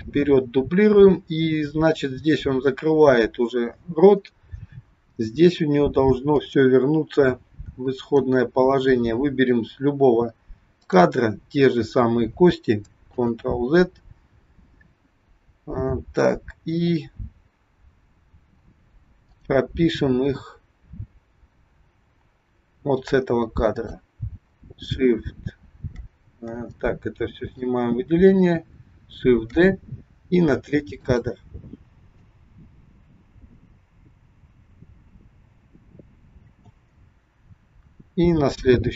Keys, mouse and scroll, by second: 6.3 click, 8.1 click, 10.7 click, 13.2 ctrl+z, 19.3 click, 23.7 click, 27.3 click, 28.2 click, 29.5 shift+d, 32.3 click.